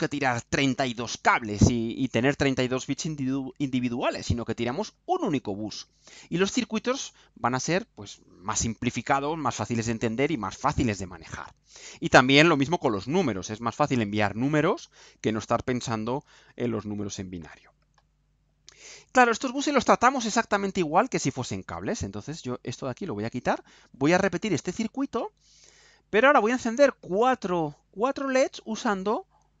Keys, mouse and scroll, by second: 22.4-24.6 drag, 26.2 Delete, 27.2-28.6 right drag.